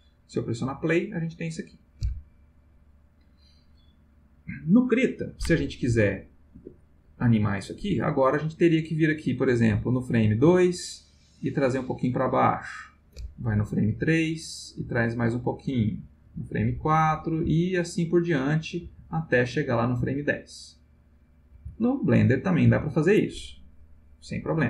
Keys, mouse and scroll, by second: 0.7 click, 6.5 Escape, 8.7-10.5 drag, 11.6-12.9 drag, 13.8 Right, 14.7-16.1 drag, 16.2 Right, 16.6 click, 17.3 Right, 17.9 click, 18.8 Right, 19.2 click, 20.0 Right, 20.6 click, 21.5 Right, 22.0 click, 22.7 Right, 24.5-24.6 drag.